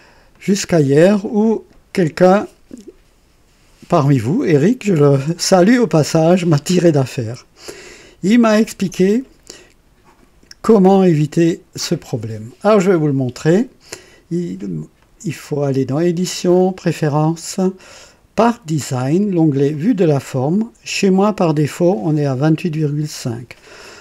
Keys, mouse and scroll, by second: 0.3-1.0 drag, 1.3-2.6 drag, 15.0 click, 16.5 click, 18.3 click, 19.7 click.